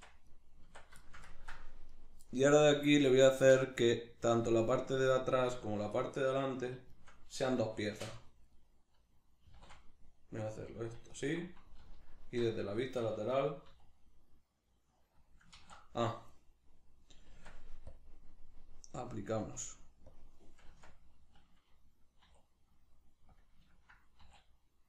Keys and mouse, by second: 0.3 right click, 0.6 Tab, 1.0 ctrl+shift+middle click, 1.9 right click, 2.3-5.0 middle drag, 5.0 right click, 5.7 ctrl+right click, 6.0-8.3 middle drag, 8.0 shift+d, 8.3 right click, 8.6-10.7 middle drag, 9.5 e, 10.7 click, 11.1 alt+right click, 11.8 alt+q, 12.8-15.3 shift+middle drag, 13.7 e, 15.3 click, 15.6 ctrl+z, 17.4 Tab, 17.9-23.4 drag, 20.7 Tab, 24.2 e.